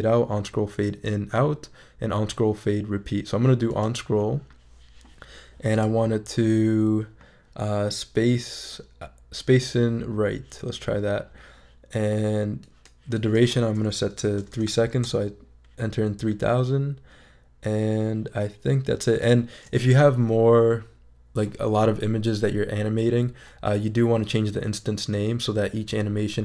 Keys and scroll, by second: 14.1 3, 14.4 0, 15.0 Return.